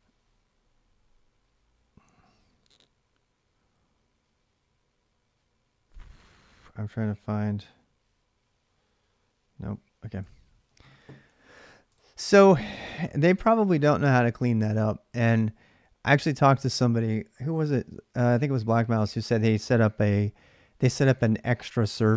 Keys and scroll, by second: 13.3 ctrl+c, 14.9 alt+Tab.